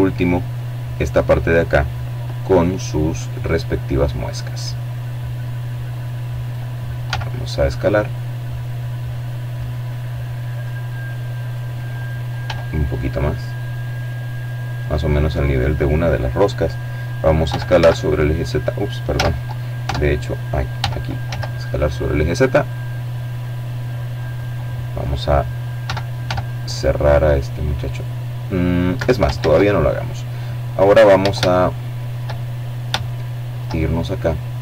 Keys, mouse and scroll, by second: 0.2-2.1 middle drag, 2.1-2.8 scroll up 2, 3.7-4.8 drag, 4.8 s, 7.3 click, 8.4-9.8 drag, 10.2 s, 13.2 click, 15.3 e, 15.5 z, 16.9 z, 17.6 Tab, 18.6 e, 19.1 z, 22.1 click, 23.6 e, 24.1 s, 26.7 Escape, 27.1 ctrl+z, 27.7-28.3 ctrl+scroll up 3, 28.3 click, 30.1 middle click, 30.8 shift+middle click, 31.6 shift+middle click, 32.2-32.9 scroll up 1, 32.9 shift+middle click.